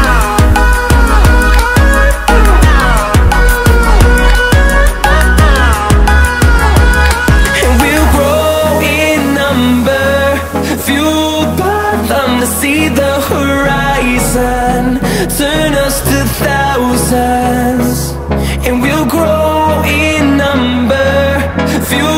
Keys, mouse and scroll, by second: 0.3-1.0 typing, 1.5 click, 5.1 5, 7.1 click, 9.1-10.2 typing, 10.9 click, 14.1-14.7 typing, 21.0-22.1 drag.